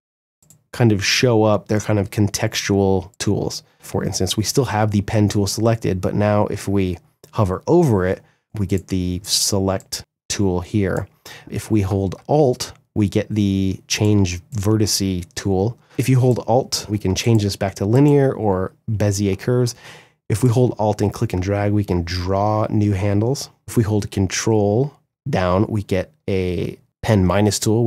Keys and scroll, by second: 3.5 space.